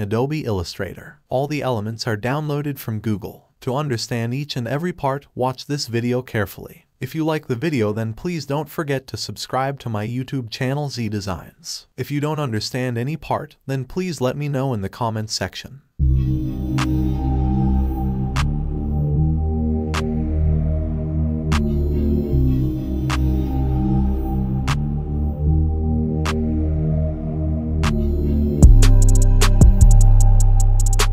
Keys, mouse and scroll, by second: 0.9 alt+scroll up 1, 1.6-2.2 scroll up 1, 2.2-3.0 click, 3.4-4.2 scroll down 1, 4.2 click, 4.7 space, 5.0 click, 5.4 space, 5.6 click, 5.9-6.5 space, 6.2 click, 7.8-8.6 alt+scroll down 1, 9.2-9.6 scroll up 1, 9.6 space, 9.7 click, 10.0-10.6 space, 11.0-11.6 alt+scroll up 1, 11.6-12.0 scroll up 1, 12.0-13.2 scroll down 1, 13.2 click, 16.2-18.4 typing, 19.1 Tab, 20.4-21.7 typing, 23.0 5, 24.8 click, 25.6 v, 26.8 click, 28.6 right click, 29.6 click.